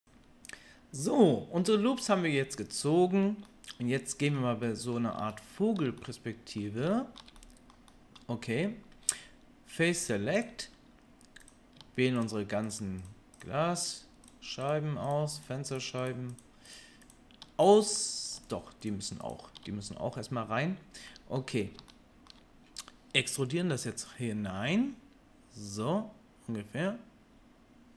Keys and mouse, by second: 0.0-10.3 middle drag, 10.3-11.5 drag, 11.5 shift+middle click, 12.1 shift+click, 12.2-13.8 shift+middle drag, 13.8 shift+click, 13.9-15.3 shift+middle drag, 15.3 shift+click, 15.4 shift+middle click, 15.7 shift+click, 15.7 shift+middle click, 16.3 shift+click, 16.4-19.2 shift+middle drag, 19.2 shift+click, 19.3-27.9 shift+middle drag, 24.5 e.